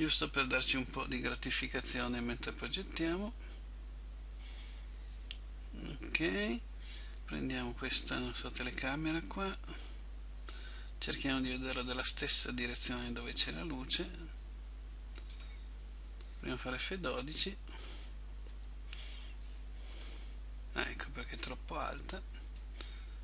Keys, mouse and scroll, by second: 1.2 click, 1.2 KP_3, 3.1 KP_7, 7.4 right click, 9.7 click, 13.0 r, 18.6 Escape, 20.0 middle click, 22.8 click.